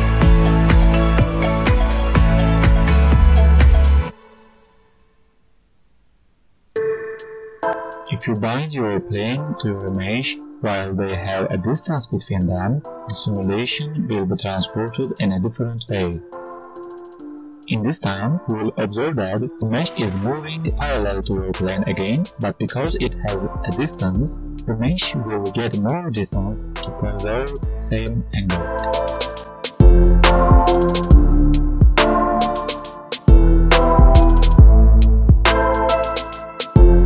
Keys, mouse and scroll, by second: 1.1 shift+s, 2.1 shift+s, 3.3 right click, 7.0 Page_Up, 7.0 right click, 8.0 right click, 10.1 click, 12.1 click, 12.7 right click, 13.9 click, 14.9 space, 15.5 g, 17.3 g, 24.0 space, 25.0 click, 26.3 click, 28.3 shift+s, 30.3 right click, 31.1 click, 32.0 click, 33.4 click, 33.7 shift+click, 34.6 g.